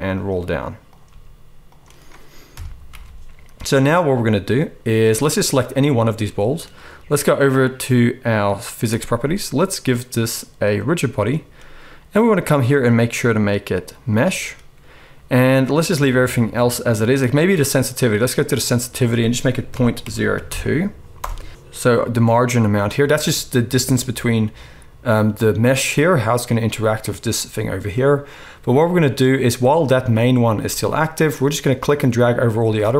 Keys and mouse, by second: 0.8 click, 1.0 g, 2.5 KP_1, 2.9 alt+a, 2.9-5.5 middle drag, 5.5 click, 5.6-8.9 middle drag, 8.9 click, 9.0-10.8 middle drag, 10.8-32.9 drag.